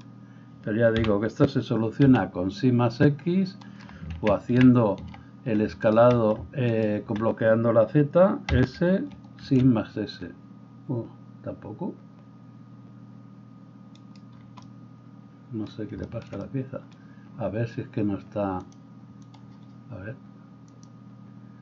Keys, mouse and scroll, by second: 1.0 g, 4.1 ctrl+z, 4.6 ctrl+z, 6.7 alt+click, 6.9-18.6 alt+middle drag, 8.5 s, 18.6-20.9 drag, 20.9-21.6 middle drag.